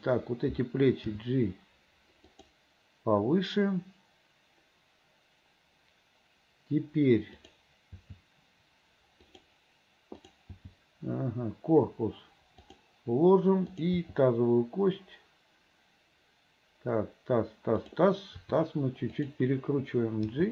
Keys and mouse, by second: 1.2 g, 7.4 click, 8.0 g, 10.6 g, 14.1 g, 18.5 r, 20.4 g.